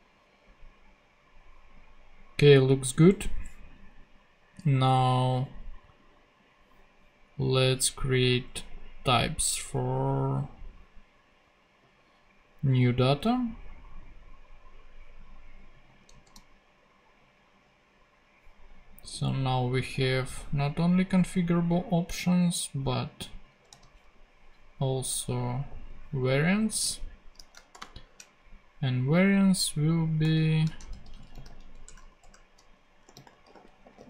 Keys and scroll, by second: 16.1 super+c, 16.3 super+f, 17.2 super+g, 19.9 Return, 21.3 super+g, 23.7 super+c, 25.5 super+g, 26.7 super+v, 27.5 shift+super+v, 27.7 shift+super+;, 27.8 shift+space, 30.9-34.0 typing.